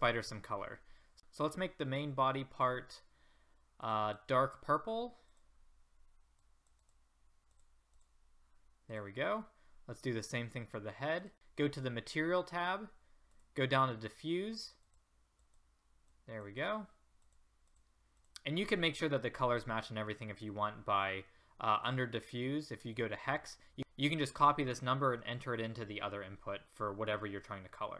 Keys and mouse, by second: 2.5-11.3 drag, 13.3-27.9 drag.